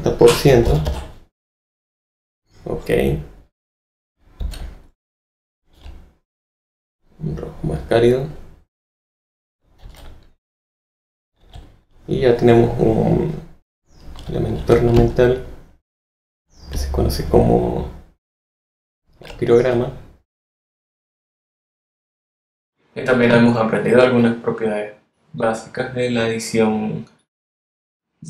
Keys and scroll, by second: 0.4-1.3 typing, 4.3 z, 5.7 alt+v, 6.2 v, 9.8 z, 11.4 alt+v.